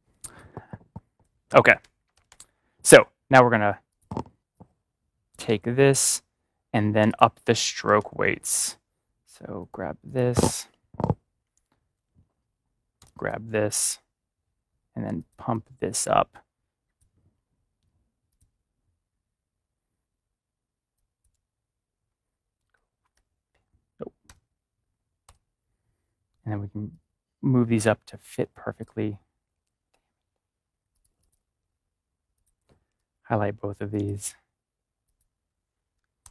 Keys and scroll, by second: 1.7 ctrl+-, 2.1 ctrl+shift+=, 7.8 ctrl+=, 11.0 Caps_Lock, 11.6 typing, 22.6-23.0 typing, 24.2-25.7 typing, 36.1 typing.